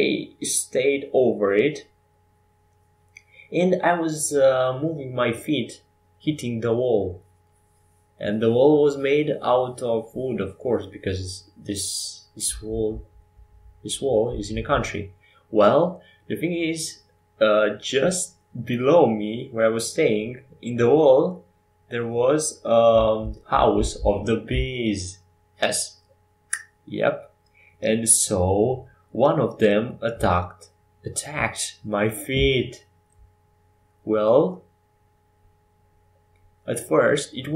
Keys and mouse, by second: 2.7-5.0 right drag, 5.0 ctrl+j, 6.7 ctrl+alt+shift+c, 10.3 g, 13.0-23.4 drag, 24.1 middle click, 28.0 s, 33.9 r.